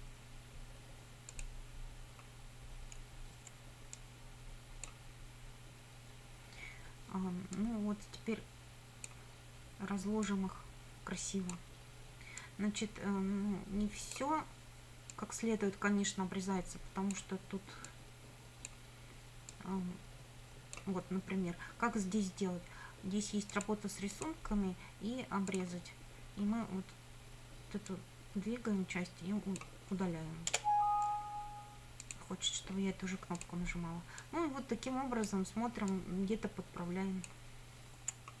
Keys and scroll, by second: 3.5 F9, 30.5 Return, 38.2 F9.